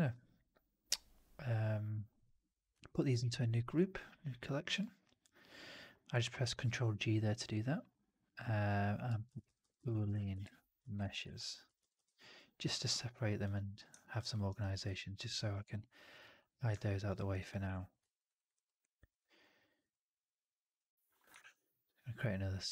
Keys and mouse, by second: 3.0 ctrl+g, 13.9 alt+click, 14.2 alt+middle drag, 14.4 alt+right drag, 14.5 alt+click, 16.6-17.0 alt+drag, 17.3 click, 18.1 right drag, 18.3 right click, 18.5-19.0 drag, 21.3 shift+Tab.